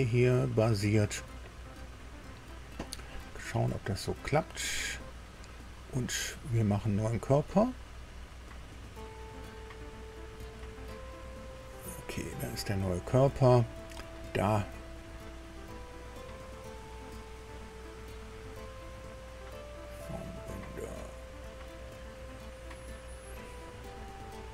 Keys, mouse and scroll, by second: 4.6 click, 8.5 click, 10.2 click, 11.7-12.0 scroll down 1, 12.3-12.6 scroll down 1.